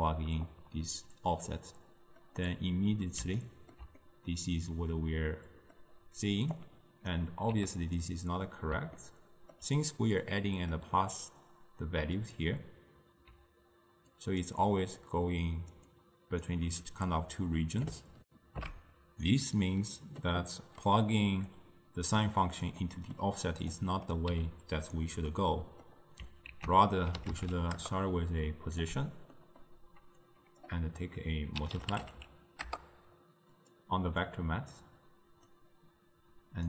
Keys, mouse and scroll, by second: 0.9-3.4 middle drag, 3.4-4.1 scroll up 1, 4.1-6.6 middle drag, 6.6-7.6 drag, 7.6 g, 9.0-12.3 ctrl+middle drag, 12.3 click, 13.4-16.7 typing, 14.2 click, 14.7 click, 15.5 click, 16.0 click, 18.3 ctrl+alt+shift+q, 20.3-21.7 middle drag, 21.7 click, 22.9-23.8 middle drag, 23.8-24.4 drag, 24.4 g, 25.4-26.6 middle drag, 26.6 ctrl+a, 29.4-30.3 middle drag, 30.3-33.4 drag, 34.3 click, 35.6 drag.